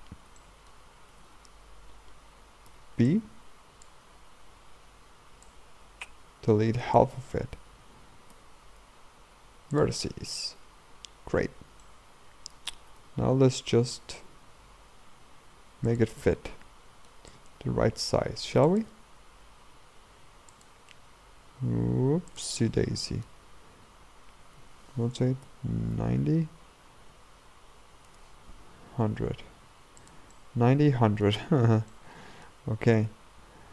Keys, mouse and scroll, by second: 0.4 shift+middle click, 1.1 a, 1.3 a, 2.7 b, 4.5 b, 11.3 Tab, 11.9-12.9 middle drag, 12.9 r, 16.3-17.5 middle drag, 17.5 r, 18.9 r, 20.9 s, 22.6-24.6 middle drag, 24.6 r, 29.2 g, 30.4-31.5 middle drag, 31.5-32.0 scroll up 2, 32.0-33.0 shift+middle drag, 33.0 r.